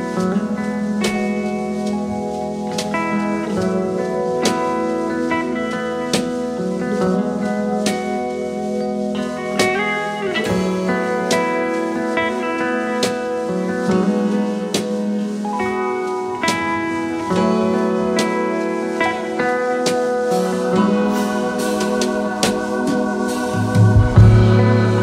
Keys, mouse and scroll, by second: 1.3-1.7 alt+scroll up 1, 2.0-2.6 space, 8.3 double click, 8.8 alt+scroll up 3, 9.8 ctrl+c, 10.0 ctrl+f, 11.4 alt+shift+click, 12.7 typing, 13.9-14.7 typing, 16.8-17.4 typing, 19.7 double click, 22.0 alt+scroll up 1.